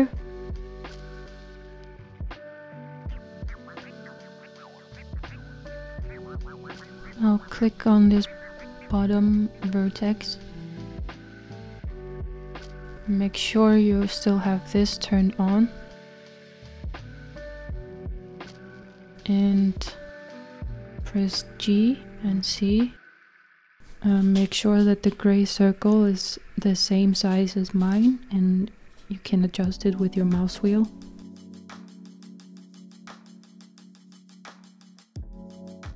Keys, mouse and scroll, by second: 2.9-3.5 Tab, 4.7 middle click, 5.6-7.1 scroll up 7, 7.2 click, 7.7-10.1 middle drag, 10.1-10.9 scroll down 8, 11.2-14.1 middle drag, 14.1 click, 15.9 click, 16.6-20.5 shift+middle drag, 20.5 g, 32.0 z, 32.6-35.9 middle drag.